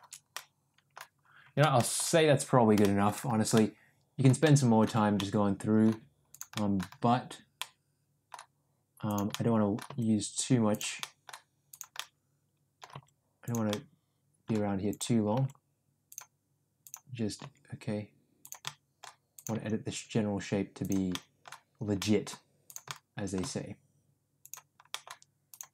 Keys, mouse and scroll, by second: 0.5 middle click, 1.9 shift+middle click, 2.9 shift+middle click, 3.7 middle click, 4.6 middle click, 5.3 middle click, 6.6 middle click, 7.6 middle click, 9.1 click, 9.4 middle click, 9.9 g, 11.1 middle click, 11.8 click, 12.0 middle click, 13.0 g, 13.9 middle click, 14.9 click, 15.4 g, 16.9 click, 17.4 g, 18.8 middle click, 19.4 click, 19.6 g, 21.2 middle click, 22.1 middle click, 22.9 middle click, 23.5 g, 25.0 middle click, 25.5 click.